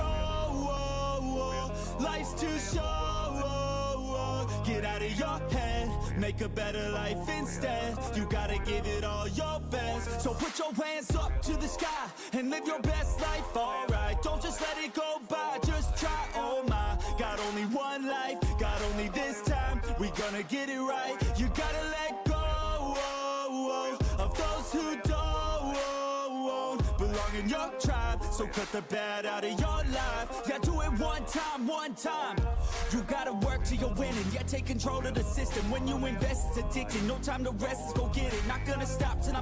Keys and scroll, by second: 1.3 1, 2.7 Return, 4.7 7, 5.2 8, 6.0 Return, 6.8 7, 7.5 6, 8.8 Return, 18.0 4, 19.0 Return, 27.6 8, 27.8 0, 29.3 Return, 30.3 1, 31.0 Return.